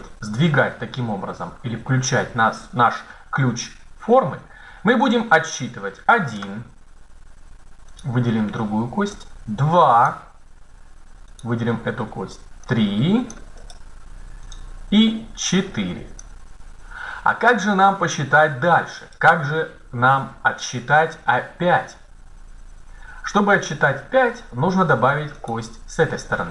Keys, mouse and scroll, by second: 7.8-9.0 right drag, 9.0 middle click, 9.6-10.8 drag, 11.2-12.6 right drag, 12.6 middle click, 13.0-14.3 drag, 14.3-15.5 right drag, 16.1-17.1 drag, 25.1 right click.